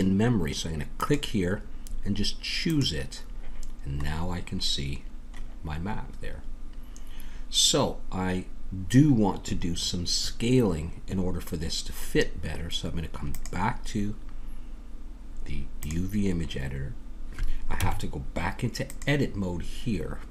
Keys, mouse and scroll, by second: 1.0-3.9 drag, 3.9-7.0 middle drag, 3.9-6.4 scroll up 1, 13.3-15.8 drag, 17.8 Tab.